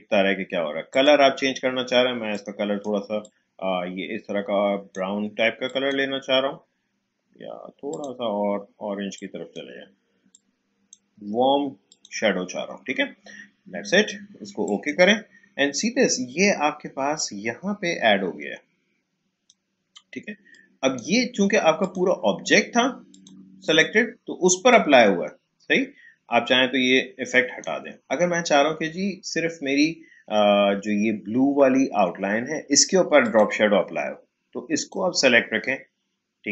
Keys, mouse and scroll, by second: 14.6 click, 17.1-30.1 drag, 33.2 click.